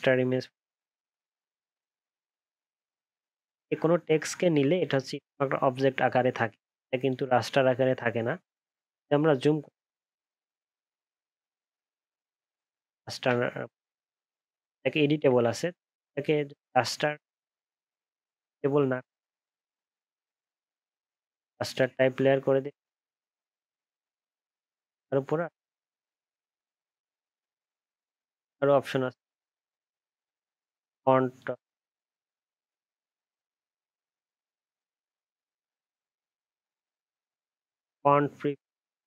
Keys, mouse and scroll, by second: 8.9 alt+scroll up 1, 10.0 alt+scroll down 1, 10.4 alt+scroll up 1, 10.7 alt+scroll down 1, 11.5-12.0 alt+scroll up 7, 12.2 alt+scroll down 1, 13.5-14.0 alt+scroll up 9, 14.1 alt+scroll down 1, 25.9 ctrl+z.